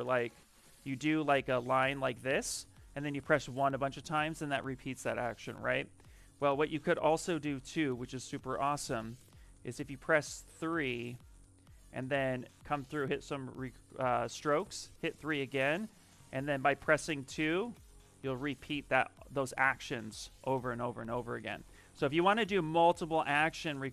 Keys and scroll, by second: 3.0 1, 3.3 1, 5.4 ctrl+z, 5.6 ctrl+z, 5.9 ctrl+z, 7.5 s, 8.9 3, 14.6 3, 16.1 2, 21.4 ctrl+z, 21.6 ctrl+z, 21.8 ctrl+z, 21.9 ctrl+z, 22.1 ctrl+z, 22.6 ctrl+z, 22.9 ctrl+z.